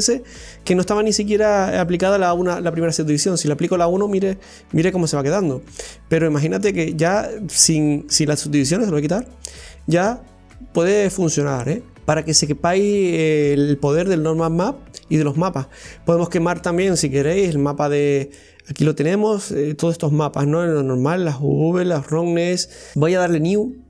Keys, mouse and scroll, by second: 3.1 click, 3.7-4.0 scroll down 1, 4.0-5.7 middle drag, 5.7 right click, 6.3-6.8 middle drag, 6.8 right click, 8.8 click, 9.6 right click, 10.1 scroll down 1, 10.5-11.8 middle drag, 11.8 scroll up 2, 12.0 right click, 14.1 click.